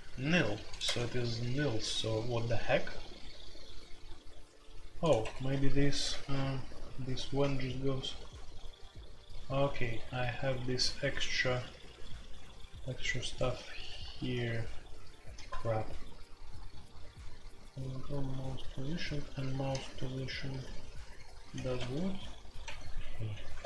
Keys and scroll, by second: 0.8 q, 5.2 Escape, 6.0 h, 7.4 h, 7.4 shift+5, 14.3-15.5 typing, 18.7-23.6 typing.